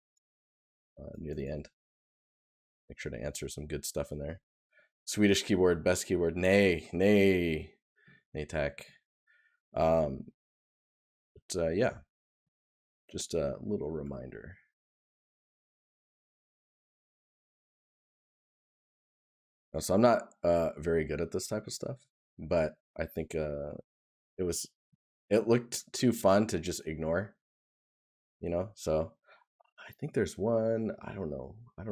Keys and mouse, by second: 7.9 right click, 21.6 right click, 31.2 right click.